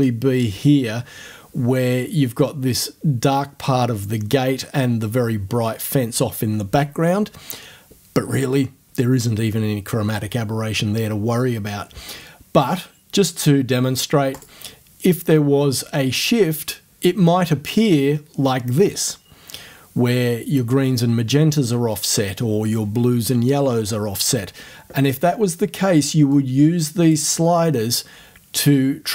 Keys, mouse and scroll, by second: 14.4 click, 26.4 click.